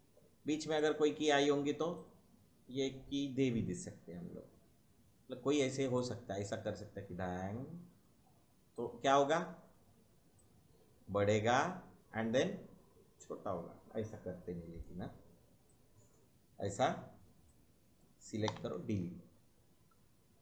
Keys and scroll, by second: 18.5 Delete.